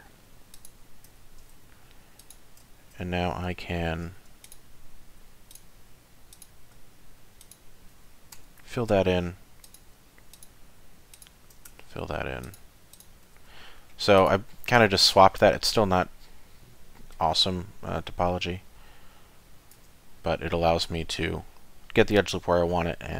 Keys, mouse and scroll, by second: 1.1 3, 2.2 click, 3.5 2, 4.1 1, 4.4 click, 5.2 2, 5.5 click, 6.3 click, 7.4 shift+click, 8.4 f, 9.6 click, 10.3 shift+click, 11.1 click, 11.8 f, 12.4 click, 12.9 alt+click, 13.4 f, 13.8-14.2 scroll down 1, 14.2 click, 16.2 middle click, 17.4 Tab, 17.9 middle click, 19.8 Tab, 20.3 scroll up 1, 22.5 middle click.